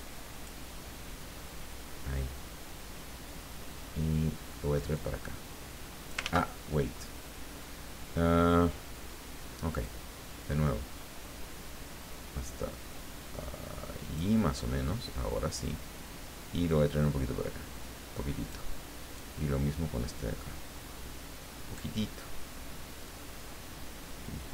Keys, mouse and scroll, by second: 5.0-6.3 drag, 6.2 ctrl+z, 9.9-14.4 drag, 15.7-19.0 drag, 19.9-22.2 drag, 23.1-24.5 drag.